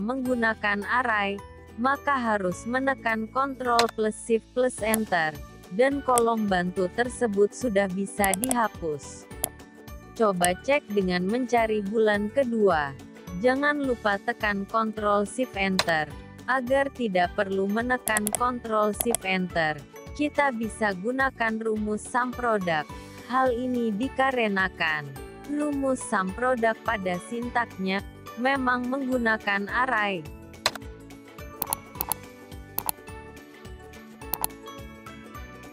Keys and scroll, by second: 2.0 ctrl+shift+Return, 14.0 ctrl+shift+Return.